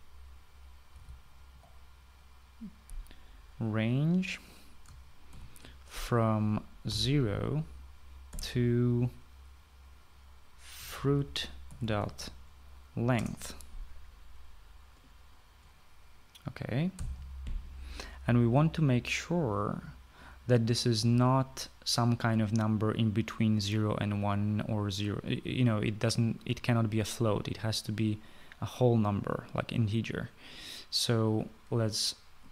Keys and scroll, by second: 0.0-2.8 typing, 6.1 (, 7.4-9.1 typing, 11.3-13.3 typing, 13.9 Return, 17.5-18.3 typing.